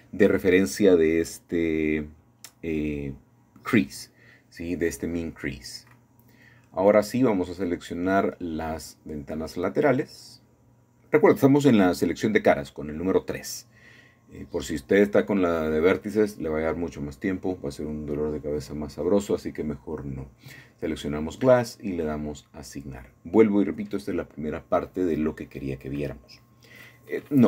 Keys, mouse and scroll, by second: 4.3 click, 5.2 shift+click, 5.8 shift+click, 6.5 shift+click, 7.3 shift+click, 8.5 shift+click, 9.0 shift+click, 9.4 shift+click, 10.1 shift+click, 11.0 shift+click, 11.5 shift+click, 11.9 shift+click, 14.0 shift+click, 14.7 shift+click, 15.3 shift+click, 15.9 shift+click, 16.5 shift+click, 17.9 shift+middle click, 18.1-19.7 shift+drag, 21.1-23.1 drag, 24.4 shift+middle click, 25.6 shift+middle click.